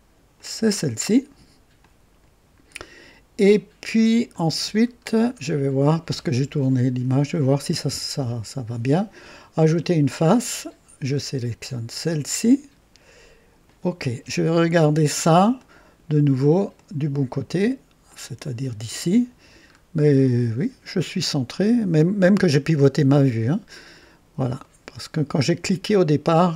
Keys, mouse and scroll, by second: 0.3 click, 1.8-4.5 drag, 5.0 scroll up 1, 9.7 click, 11.7 click, 13.6 click, 15.6 click, 16.7 click, 18.1 click, 19.7 scroll up 1, 24.6-25.6 right drag.